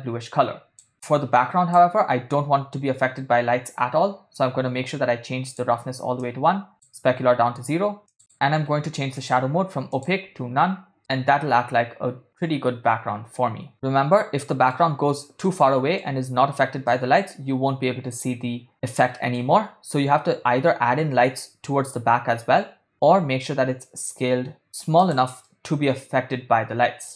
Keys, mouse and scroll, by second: 0.9 click, 4.4-6.0 drag, 6.5-8.5 drag, 9.2-10.2 drag, 11.0-14.9 middle drag, 15.7-16.2 middle drag, 17.1-18.4 middle drag, 18.7-19.7 middle drag, 23.2 s, 25.6-27.1 middle drag.